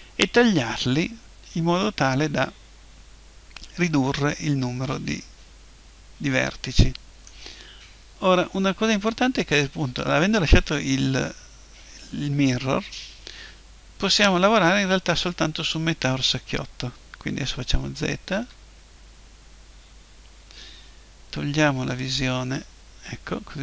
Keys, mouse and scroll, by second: 4.2-5.9 middle drag, 12.9-14.9 middle drag, 17.6 z, 18.3 z, 22.0-23.6 drag.